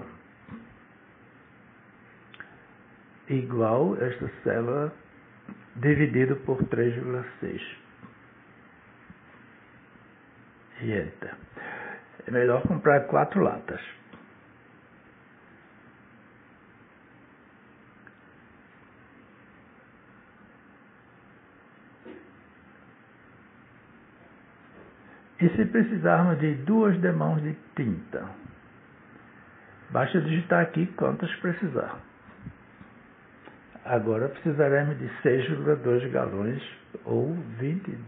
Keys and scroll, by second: 2.1 =, 6.8 /, 8.7 3, 9.0 ., 9.6 6, 10.7 Return, 14.1-17.2 typing, 18.7-19.8 typing, 21.1 Return, 31.7 2, 32.7 Return.